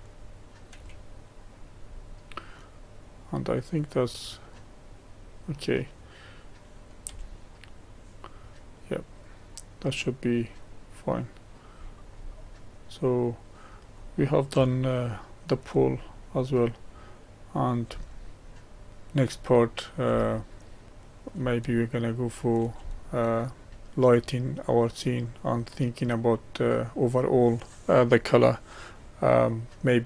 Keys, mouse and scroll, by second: 0.8 g, 2.2-7.1 middle drag, 7.1 Tab, 7.8-11.8 middle drag, 11.8-12.8 scroll down 4, 12.8-15.9 middle drag, 15.9-16.8 scroll down 2, 16.8-19.3 middle drag, 19.3 scroll down 2, 19.4-30.0 middle drag.